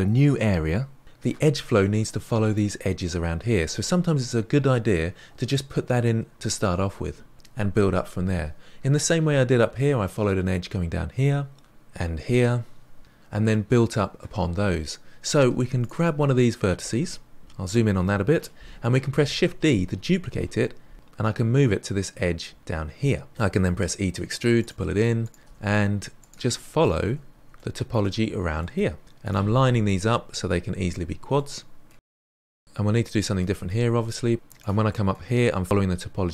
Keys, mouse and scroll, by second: 0.8-4.0 middle drag, 15.8 click, 17.4-19.3 scroll down 10, 19.3 shift+d, 23.3 scroll down 2, 23.5 e, 24.2 click, 24.5 e, 25.0 middle click, 25.3 e, 26.5 shift+middle click, 26.8 scroll down 2, 27.0 middle click, 27.1 scroll up 1, 27.3 e, 27.8 e, 29.3 shift+middle click, 29.9 e, 30.4 e, 31.0-31.4 middle drag, 31.4 e, 32.3 shift+middle click, 33.3 middle click, 34.0 e, 36.0-36.3 middle drag.